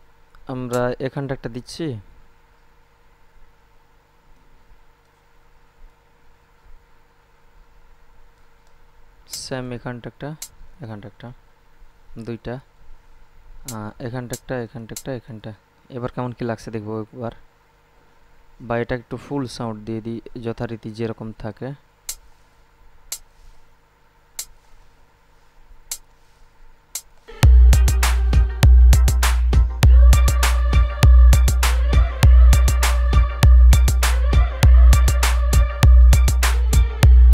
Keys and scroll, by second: 27.4 space.